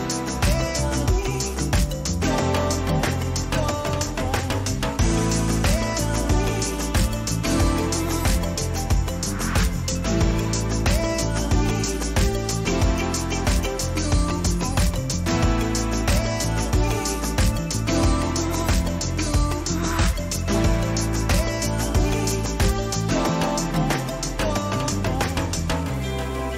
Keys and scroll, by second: 5.8 Return, 7.3 ctrl+alt+z, 20.6 ctrl+t.